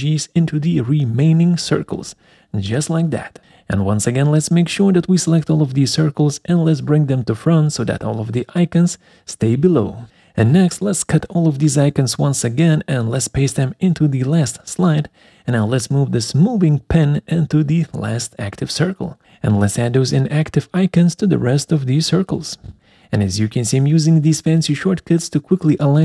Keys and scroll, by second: 0.0 ctrl+alt+Right, 0.1 ctrl+alt+Down, 5.0 ctrl+alt+Right, 5.2 ctrl+alt+Down, 13.5 ctrl+v, 17.5 ctrl+alt+Left, 17.6 ctrl+alt+Up, 21.2 ctrl+alt+Right, 21.3 ctrl+alt+Up, 25.7 ctrl+alt+Right, 25.8 ctrl+alt+Down.